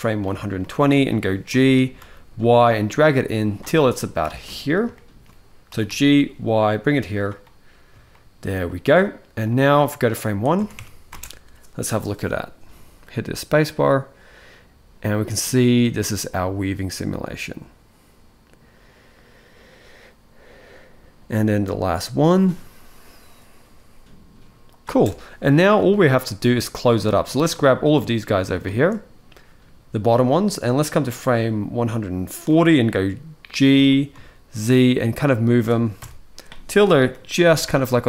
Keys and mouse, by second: 0.3-0.8 shift+middle drag, 1.2 g, 4.2 middle drag, 4.7-5.0 shift+middle drag, 5.4 g, 7.9-8.2 shift+middle drag, 9.2 click, 10.1 click, 10.3 Tab, 10.5 Tab, 10.8 space, 24.6 space, 24.8-25.5 middle drag, 25.6-26.2 shift+middle drag, 30.4-32.2 drag, 33.2 middle click, 33.5 g, 35.7 KP_1, 37.1 g.